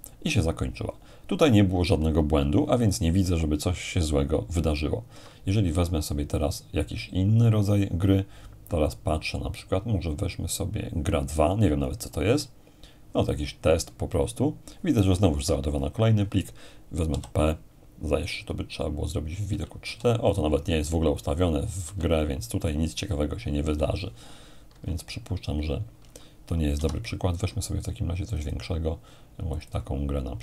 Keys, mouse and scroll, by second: 5.1 F1, 6.3-7.4 drag, 11.8-13.0 drag, 17.1 p, 19.5 p, 19.8 p, 20.3-22.2 drag, 21.8 p, 24.7 Escape, 26.8 F1, 28.3-29.5 drag, 30.1 click.